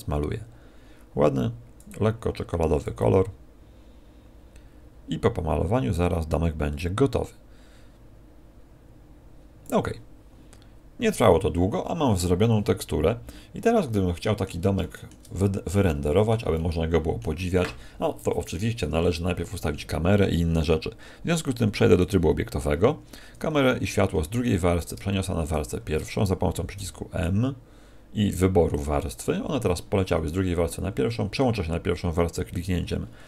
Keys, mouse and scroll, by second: 1.9 click, 3.0 click, 13.6 middle click, 14.8 shift+middle click, 15.3-15.8 scroll down 5, 15.8 middle click, 16.5 middle click, 21.4 click, 23.2 2, 24.0-24.7 scroll down 3, 24.7 right click, 24.7-25.2 scroll down 2, 25.4 shift+right click, 32.4 click.